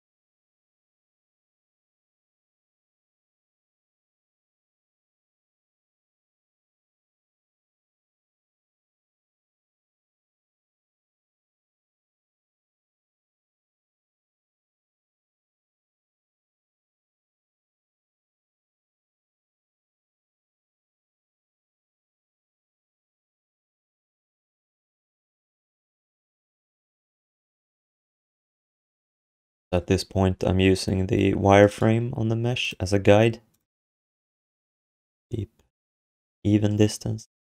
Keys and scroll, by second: 8.8 ctrl+s.